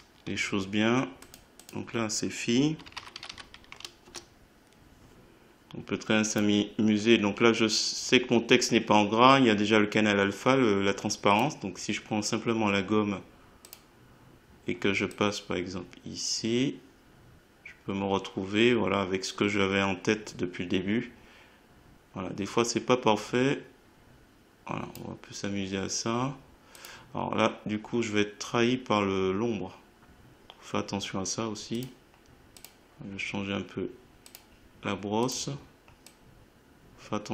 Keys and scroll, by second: 2.6-3.7 typing, 4.0 Return.